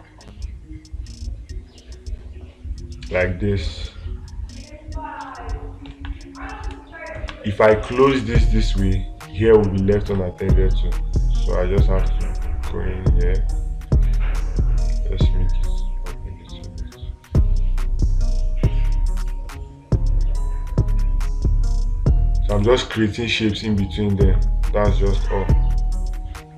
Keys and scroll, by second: 10.6 space, 23.0 space.